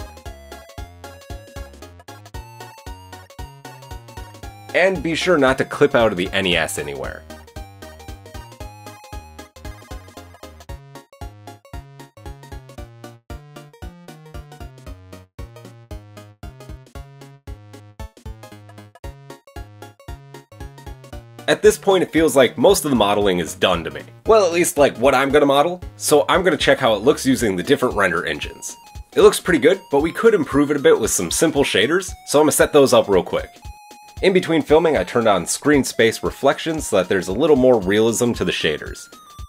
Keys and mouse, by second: 1.4-3.3 drag, 3.3-4.6 middle drag, 3.8 Tab, 4.6 click, 4.9-5.4 middle drag, 6.0 Tab, 7.2-10.4 middle drag, 10.4 click, 11.3 g, 12.0 Tab, 12.0 middle click, 12.3 Tab, 12.4 click, 12.5-16.0 middle drag, 12.7 g, 13.0 Tab, 13.9 KP_1, 16.0 click, 16.2 shift+middle click, 16.5-22.7 drag, 19.0 BackSpace, 22.7-23.7 middle drag, 23.7 click, 23.8-30.3 middle drag, 30.6-31.5 middle drag, 32.0 middle drag, 33.8-35.9 middle drag, 36.1 middle click, 37.6 click.